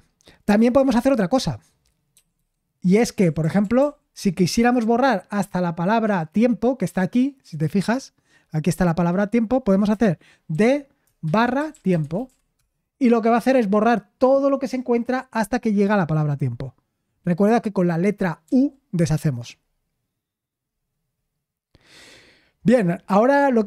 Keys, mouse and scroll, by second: 2.1-3.8 typing, 10.5-12.7 typing, 18.4 u.